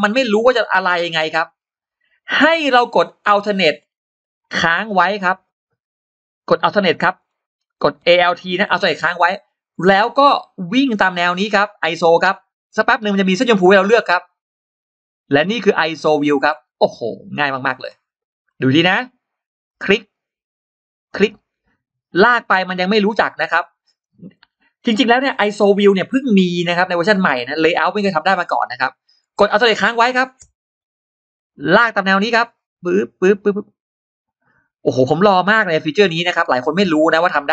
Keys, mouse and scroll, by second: 0.9-1.6 scroll down 4, 2.0-2.7 scroll up 4, 6.8 scroll down 2, 9.1-9.9 alt+scroll up 4, 15.9 alt+click, 16.4-17.1 scroll down 4, 17.7 scroll up 2, 18.3 scroll up 2, 19.5 click, 20.9 click, 27.6 scroll down 2, 28.1-28.8 scroll up 2.